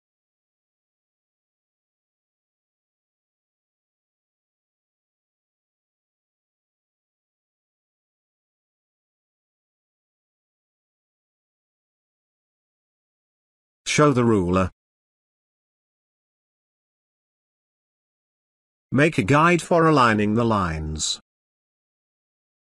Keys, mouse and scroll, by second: 0.7 Escape, 2.0 click, 4.3 shift+click, 6.2 click, 14.3 click, 16.8-22.7 drag.